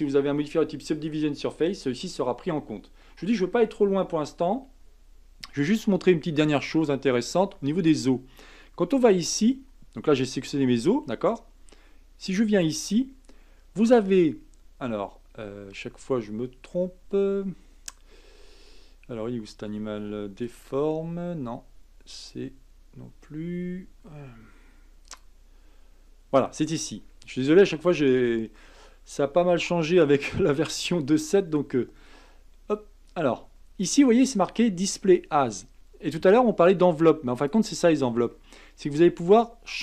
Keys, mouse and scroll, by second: 6.4 click, 12.4 click, 20.4-22.5 drag, 25.0 click, 33.1-39.8 drag.